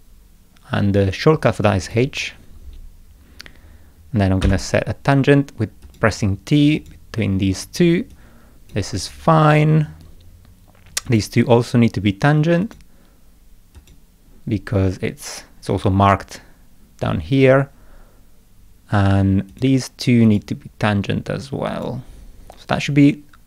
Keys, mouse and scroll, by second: 1.8 click, 4.4 t, 5.8 click, 6.8 click, 8.1 click, 11.1 click, 12.6 click, 13.8 click, 19.5 click, 20.3 click, 21.7 click.